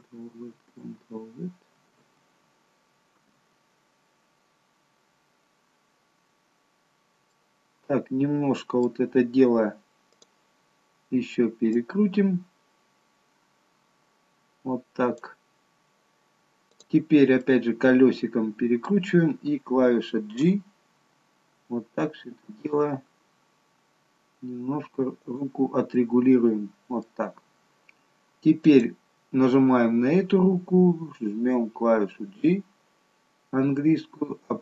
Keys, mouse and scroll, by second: 1.2 ctrl+z, 2.6 ctrl+z, 5.3 ctrl+z, 5.4 ctrl+z, 6.3-7.0 scroll down 3, 7.3 middle click, 10.1 click, 11.7 click, 16.7 click, 17.5 middle click, 20.3 g, 25.9 middle click, 27.5-28.7 scroll down 1, 28.7 click, 28.7-29.3 scroll down 1, 29.8-30.6 scroll up 1, 32.1 g.